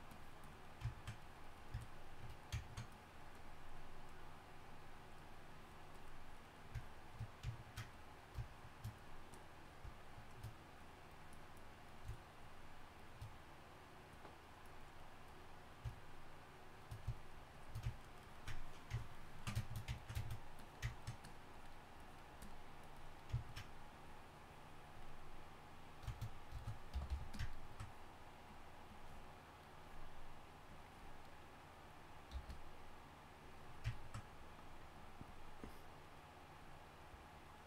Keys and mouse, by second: 19.7-26.9 drag, 27.1 g, 27.6 g, 27.6 f, 32.3 f.